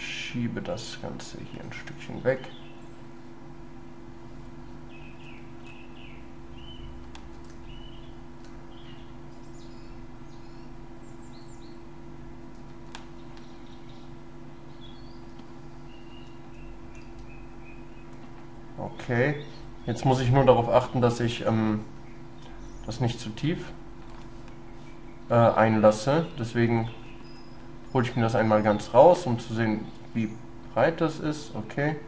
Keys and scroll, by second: 17.1 ctrl+y.